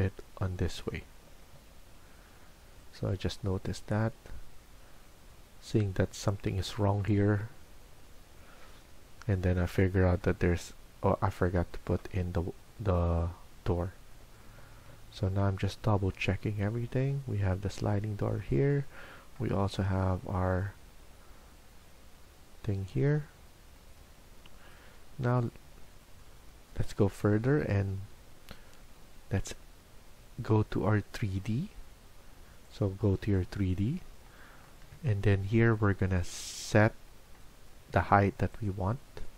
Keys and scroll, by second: 25.6 Escape.